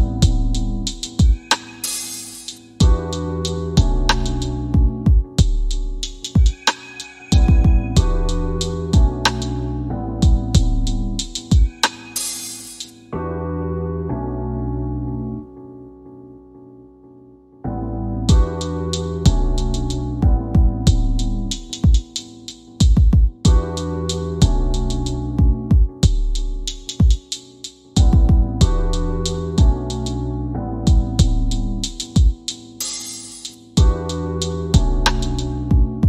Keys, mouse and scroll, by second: 1.4-2.5 drag, 2.7 space, 4.7 space, 5.7-14.3 drag, 15.8 click, 17.3 shift+d, 20.8-33.6 drag, 34.3 scroll down 2.